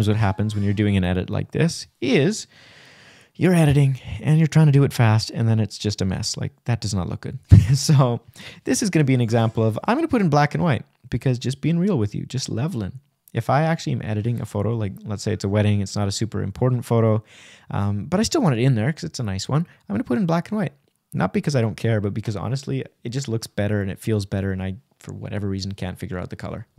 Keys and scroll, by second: 20.1 Right.